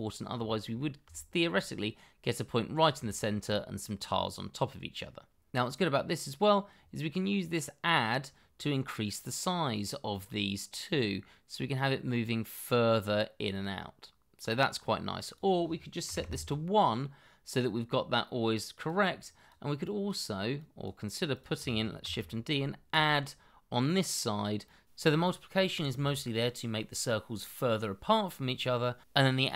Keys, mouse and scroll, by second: 0.0-0.3 scroll up 1, 0.4 shift+middle click, 2.6-2.9 scroll down 1, 3.0 shift+middle click, 16.0 KP_1, 16.2 Return, 22.0 shift+d.